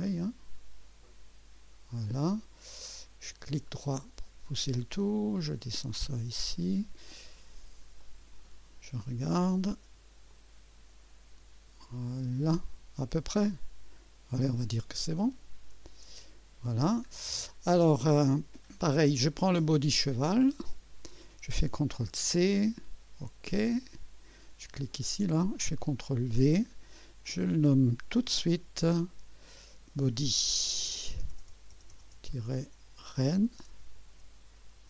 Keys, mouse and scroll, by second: 2.9-4.0 right drag, 4.5-7.0 drag, 7.3-7.8 scroll up 2, 8.0-8.9 right drag, 10.3 click, 13.4 scroll up 1, 15.7 click, 17.2 scroll down 1, 20.7 click, 22.1 ctrl+c, 23.8 click, 24.9 click, 25.9 ctrl+v, 27.3 click, 28.2 F2, 29.4 click, 30.6 BackSpace, 33.2-34.8 typing.